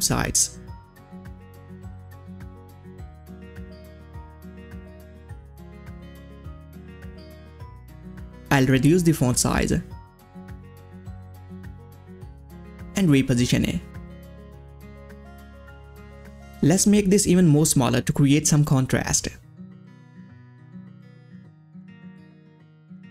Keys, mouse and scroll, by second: 0.0-4.9 typing, 3.2 Right, 6.4 shift+Down, 6.4-8.1 drag, 8.1 ctrl+a, 9.4 click, 9.6-10.4 typing, 10.5 Return, 12.1-21.1 drag, 21.7 click, 22.1 click.